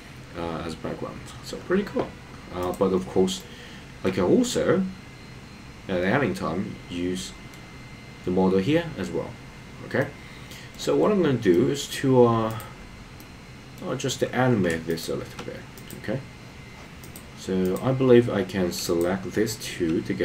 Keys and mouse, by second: 3.4 middle click, 4.5-7.5 middle drag, 10.0 middle click, 11.5 middle click, 13.2 middle click.